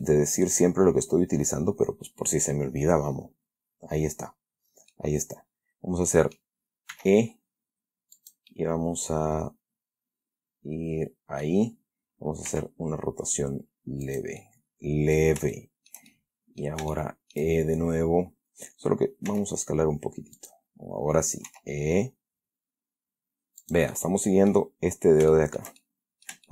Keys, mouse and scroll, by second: 0.3 shift+middle click, 5.2-6.9 middle drag, 7.2 e, 8.5 click, 8.8-11.9 middle drag, 12.8 r, 14.4 click, 14.7 middle click, 15.9-17.1 shift+middle drag, 17.2 shift+middle click, 19.6 s, 20.7 click, 21.8 e, 23.9-25.0 drag, 25.6-26.5 shift+middle drag.